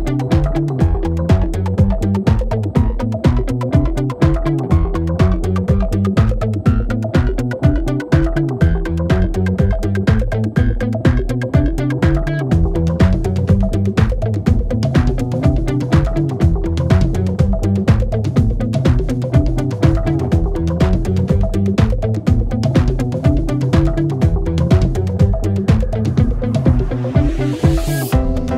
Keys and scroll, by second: 0.1 Return, 7.1-9.3 typing, 9.4 Return, 18.5 F9.